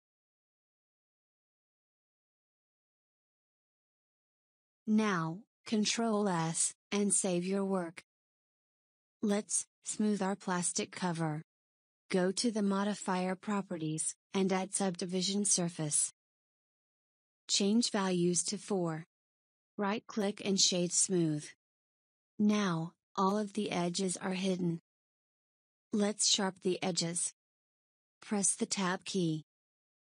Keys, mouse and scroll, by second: 0.0 click, 0.7 KP_1, 7.0 ctrl+s, 10.3 click, 12.8 click, 15.6-16.6 drag, 17.7 click, 19.0 click, 20.6 click, 21.5-27.8 right drag, 27.8 Tab.